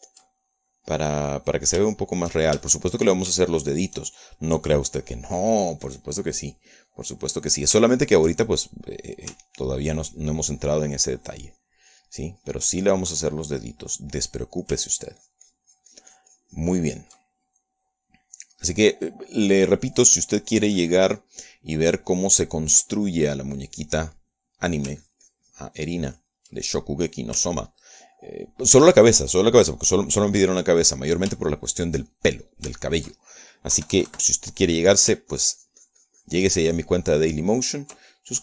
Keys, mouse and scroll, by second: 0.3-1.5 ctrl+drag, 1.6 ctrl+click, 2.3 ctrl+click, 3.1 shift+click, 4.0 shift+middle click, 4.8 shift+middle click, 5.9 middle click, 7.1 middle click, 8.4-10.1 middle drag, 10.6 ctrl+shift+middle click, 10.7-15.6 ctrl+shift+drag, 15.7 middle click, 16.2-18.5 ctrl+drag, 18.5 ctrl+middle click, 21.3-26.0 drag, 26.3-27.9 ctrl+drag, 27.9 ctrl+middle click, 28.9-31.3 ctrl+drag, 31.4 ctrl+middle click, 32.2-33.3 middle drag, 33.4-34.5 shift+middle drag, 34.7 shift+middle click, 35.1 KP_Add, 35.7 middle click, 36.7-38.4 ctrl+drag.